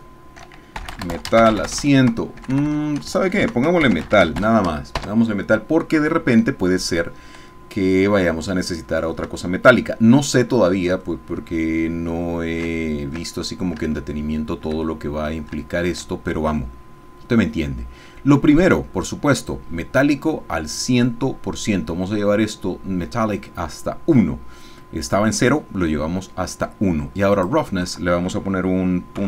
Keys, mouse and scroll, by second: 0.8-2.5 typing, 3.4 shift+Home, 3.8-4.3 typing, 5.0 Return, 7.9 click, 9.4 shift+middle click, 9.6-10.9 shift+drag, 11.2 ctrl+shift+click, 11.3-13.3 ctrl+middle drag, 13.3 ctrl+shift+click, 14.1 shift+click, 14.9 shift+click, 18.7-20.0 drag, 27.3 click, 29.1 KP_Decimal.